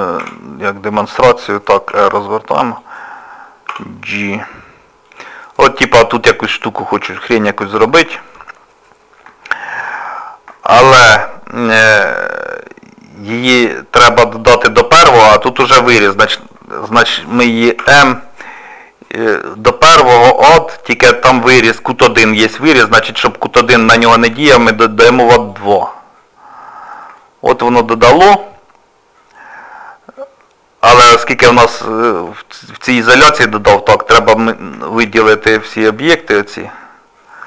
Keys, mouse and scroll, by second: 0.2 s, 1.9 r, 3.7 g, 5.4 middle click, 9.0 scroll down 2, 9.5 shift+middle click, 10.0 scroll down 2, 10.7 shift+middle click, 11.0 scroll down 1, 11.2 middle click, 12.2 scroll up 1, 13.8-14.2 scroll up 1, 16.2 shift+middle click, 17.8 m, 26.6 scroll down 1, 26.6-27.2 scroll up 3, 27.2 shift+middle click, 27.5-27.9 scroll down 1, 27.9 click, 28.5 middle click, 30.3 scroll down 1, 31.5 scroll down 1, 31.9 shift+middle click, 33.3 click, 34.1 shift+click, 34.7 shift+middle click, 35.9 click.